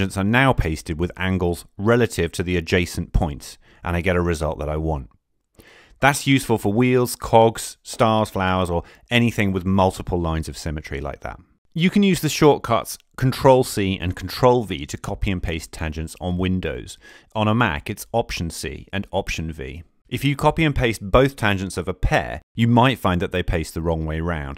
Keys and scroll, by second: 17.1 alt+c, 20.5 alt+v.